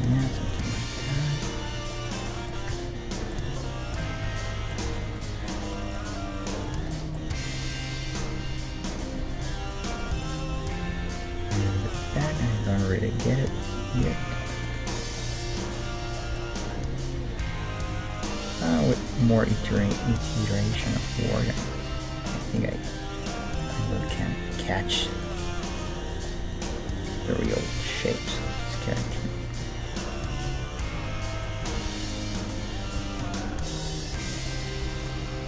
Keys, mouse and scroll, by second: 2.7 Tab, 4.3 Tab, 5.2-8.6 right drag, 7.3 g, 7.4-8.9 middle drag, 9.2-10.7 right drag, 10.1 middle click, 10.9 g, 12.1-14.4 right drag, 12.3 g, 14.0 g, 15.2-18.9 right drag, 15.4 g, 17.2 g, 19.2-21.0 right drag, 19.4 g, 20.1 g, 21.0-22.7 middle drag, 21.5 g, 23.2-24.8 middle drag, 25.4 g, 26.6 g, 28.4 g, 29.3-33.6 right drag, 30.5 g, 31.3-33.3 middle drag, 31.8 g, 33.0 g, 34.5-35.4 middle drag.